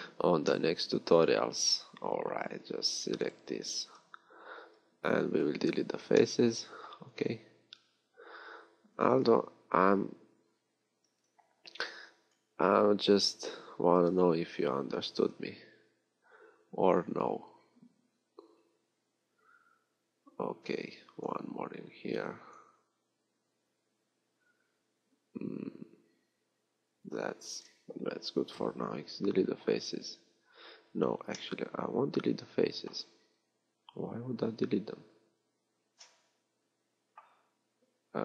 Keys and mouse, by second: 4.4 b, 7.8 b, 10.0 b, 20.9 b, 22.2 b, 36.8-38.2 middle drag.